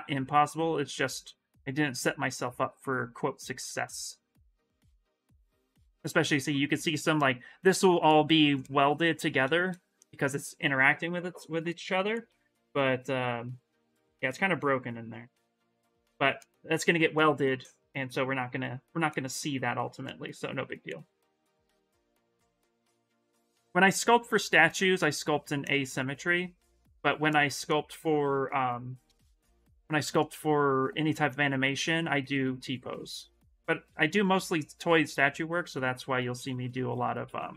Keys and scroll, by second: 31.8 s, 35.7 ctrl+z, 35.9 ctrl+z, 36.0 ctrl+z, 36.1 ctrl+z, 36.3 ctrl+z, 36.4 ctrl+z, 36.5 ctrl+z, 36.7 ctrl+z, 36.8 ctrl+z, 37.0 ctrl+z.